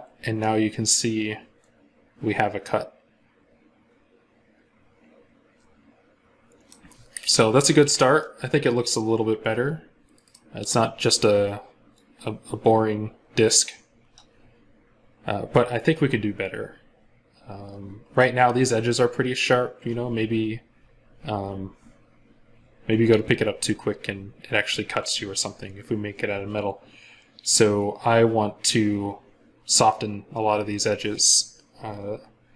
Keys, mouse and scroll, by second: 0.2 middle click, 7.8 scroll up 1, 8.0 middle click, 15.0-15.6 scroll down 1.